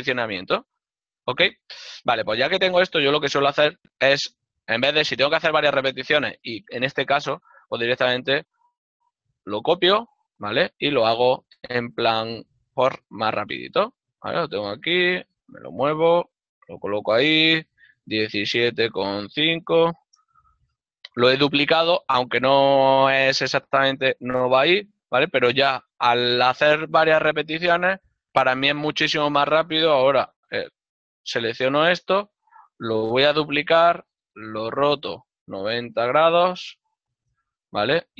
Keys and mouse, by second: 1.4 shift+middle click, 4.3 l, 5.0 right click, 8.2 l, 11.2 z, 13.7 click, 14.6 g, 20.7 Return, 34.1 z, 34.9 KP_9, 37.4 Return, 37.4 KP_Enter.